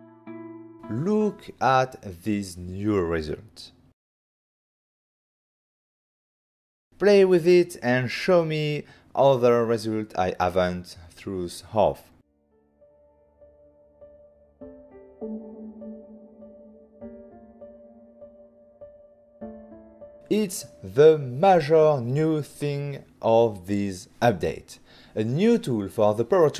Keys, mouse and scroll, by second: 0.8-1.6 typing, 2.6 Return, 3.4-5.1 typing, 5.2 Return, 5.8 middle click, 6.7 Return, 9.7 middle click, 11.4 ctrl+middle click, 12.5 middle click, 13.0 shift+middle click, 14.1 click, 14.3-15.2 ctrl+scroll up 2.